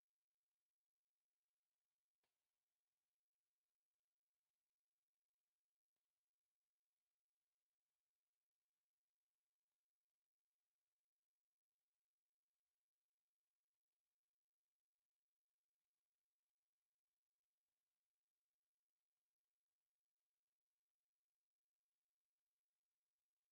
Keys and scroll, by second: 0.1 e, 0.2 space, 1.3 s, 1.5 space, 3.4 3, 3.9 Return, 4.6 Escape, 5.1 m, 5.2 space, 6.2 s, 6.3 space, 6.7 Escape, 7.8 3, 8.2 Return, 9.0 m, 9.1 space, 13.3-16.5 typing, 13.8 Escape, 15.5 Escape, 18.7 Escape, 20.2 p, 20.4 space, 23.3 Escape.